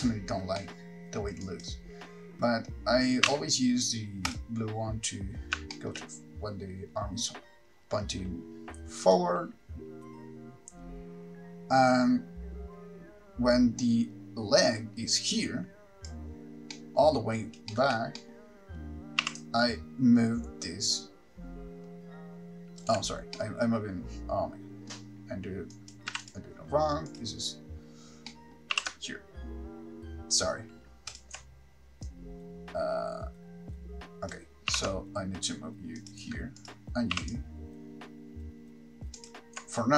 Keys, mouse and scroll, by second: 1.6 middle click, 1.6 click, 1.6-2.3 scroll up 7, 4.6 r, 9.3 shift+middle click, 9.3 click, 16.9 middle click, 17.5-17.9 scroll down 2, 17.9 shift+middle click, 18.4 middle click, 19.5 r, 23.1 ctrl+right click, 23.6 middle click, 25.9 click, 26.5 x, 27.4 click, 28.5 middle click, 28.9 r, 31.4 ctrl+click, 32.3 click, 35.0 r, 36.3 ctrl+click, 36.9 click, 37.4 r, 39.5 ctrl+click.